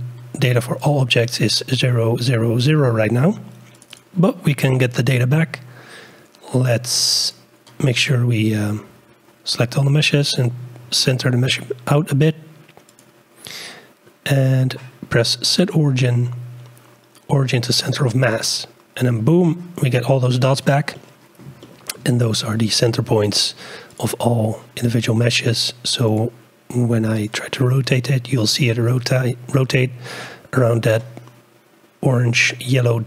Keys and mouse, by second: 0.8 click, 3.9 click, 7.2 click, 8.4 g, 14.4-18.8 drag, 20.9-21.4 middle drag, 21.6-22.0 shift+middle drag, 22.7 shift+click, 23.4 click, 23.9-27.4 drag, 27.7 r.